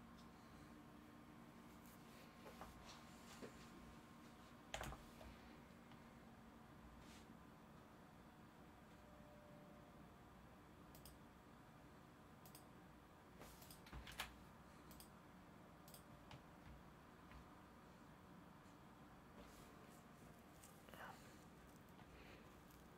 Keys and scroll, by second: 4.7 0, 14.0 ctrl+a.